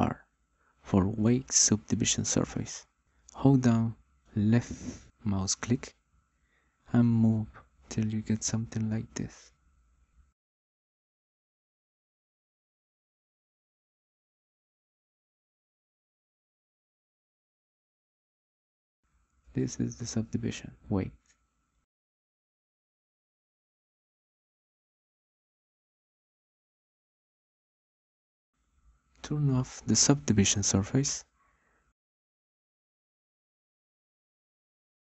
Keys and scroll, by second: 0.8 m, 2.1 r.